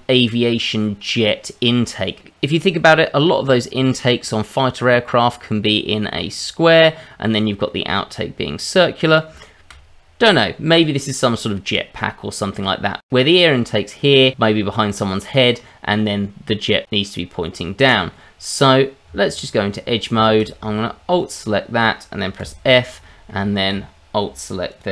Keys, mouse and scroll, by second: 7.7 middle click, 9.4 shift+middle click, 10.7 click, 11.8-12.5 scroll up 2, 12.5 middle click, 13.0 scroll down 1, 14.7 middle click, 17.8-18.1 scroll up 2, 18.1 middle click, 19.0 Tab, 19.9 scroll up 2, 20.2 shift+middle click, 21.1 alt+click, 22.4 f, 22.7-23.3 scroll down 3, 23.0 middle click, 23.4 shift+middle click, 23.8-24.2 scroll up 3, 24.7 alt+click.